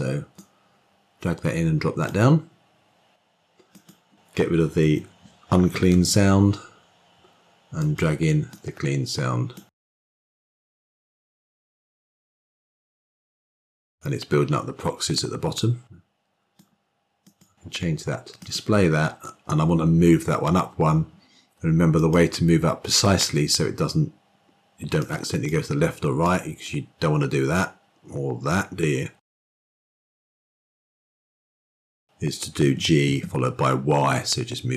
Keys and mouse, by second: 3.7 click, 4.7 Delete, 15.0-16.5 drag, 17.2 click, 18.3 click, 21.9 click, 24.9 click, 26.1-29.4 drag, 31.0 ctrl+z, 31.3 ctrl+z.